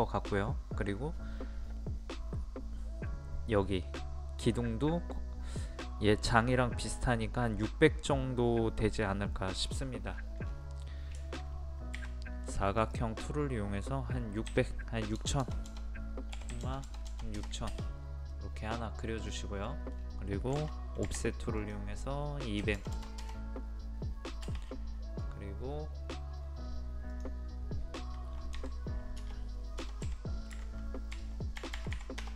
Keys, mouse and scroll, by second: 10.2-11.2 scroll down 1, 11.2 shift+middle click, 12.8 click, 14.5 KP_6, 18.3 middle click, 19.0-19.7 scroll up 1, 19.7 middle click, 21.6 click, 22.6 KP_2, 24.7 middle click, 25.2 scroll down 1, 25.3-25.9 scroll up 1, 27.2 click, 28.6 1, 29.2 BackSpace, 29.8 KP_0, 30.1 KP_Decimal, 31.8 typing, 32.2 Return.